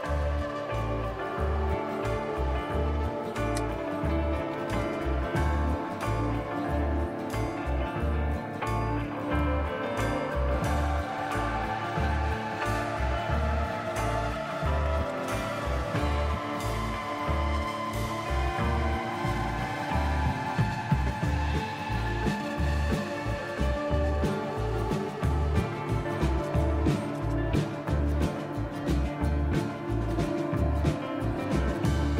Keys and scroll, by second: 0.2 typing, 4.2-4.8 typing, 5.9-6.8 typing, 14.6-15.3 typing, 17.7-19.7 typing, 25.5-27.2 typing, 30.3 typing.